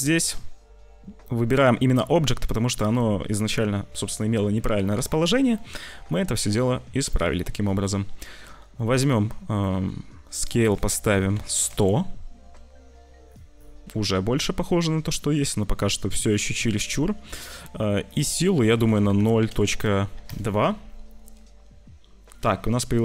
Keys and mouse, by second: 0.3 c, 2.4 click, 5.1 click, 6.1 click, 7.6 click, 8.3 click, 9.6 click, 10.4-11.5 drag, 11.4 0, 18.0-20.3 drag.